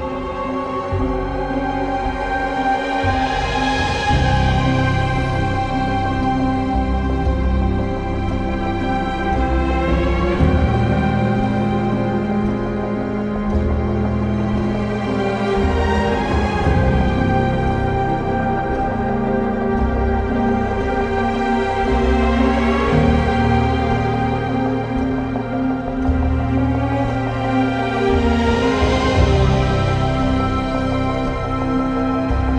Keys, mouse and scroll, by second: 18.3 b, 18.7 ctrl+z, 20.3 ctrl+z, 22.1-22.5 typing, 24.0 typing, 24.2 ctrl+z, 25.3 e, 26.5 ctrl+z, 28.9 ctrl+z, 29.5-30.0 typing.